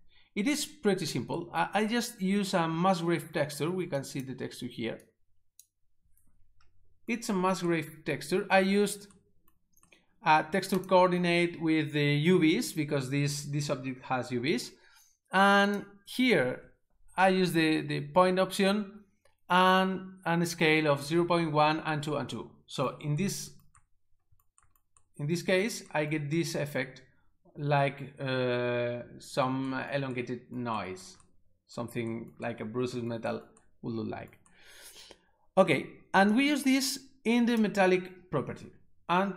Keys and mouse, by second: 4.0 click, 5.1 click, 10.8 click, 15.7 click, 36.4 click.